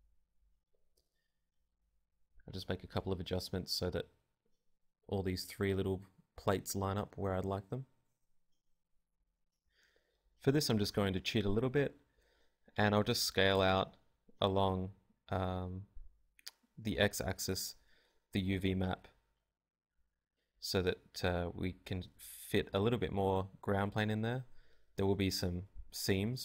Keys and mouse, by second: 0.2 click, 0.2 g, 1.5 click, 2.3-3.4 drag, 2.5 Tab, 2.9 KP_1, 3.4 Tab, 3.7 Tab, 3.9 b, 4.2 ctrl+Tab, 4.8 g, 5.2 click, 5.4 KP_0, 5.7 Tab, 7.0-8.0 right drag, 7.0-8.6 typing, 8.2 click, 8.7 right click, 11.4 click, 11.4 a, 12.2 right click, 12.5 KP_0, 12.6 Tab, 12.7 a, 12.9 a, 13.5 s, 14.9 click, 14.9 g, 16.5 s, 16.6 Tab, 17.0 a, 19.0 Escape, 19.5 g, 20.1 g, 20.7 m, 22.6 KP_0.